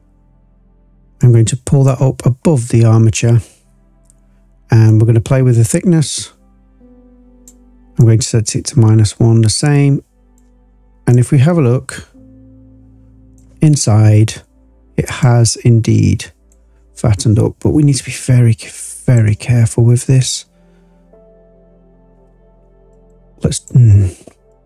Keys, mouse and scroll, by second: 1.1-1.8 drag, 4.8-7.5 drag, 7.9-10.4 drag, 11.1-13.3 drag, 15.1-16.4 drag, 17.1-19.1 drag, 22.9 click, 23.5 click, 24.5 click.